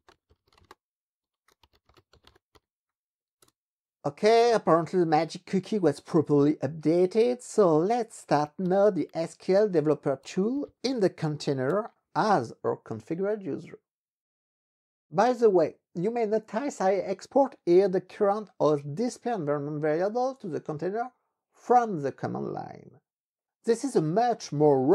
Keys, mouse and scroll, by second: 0.0-3.1 typing, 3.5 Return, 8.4 ctrl+x, 8.7 ctrl+e, 9.4-11.2 typing, 11.7 Return.